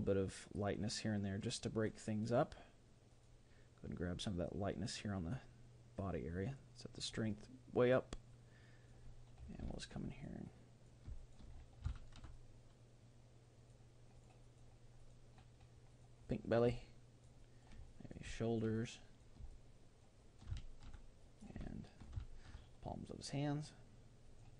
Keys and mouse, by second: 2.2-5.3 drag, 6.5-9.9 drag, 9.7-13.6 middle drag, 10.1-12.1 drag, 12.3-14.0 drag, 14.2-20.4 drag, 16.7-24.5 middle drag, 21.2-22.9 drag, 23.0-24.5 drag.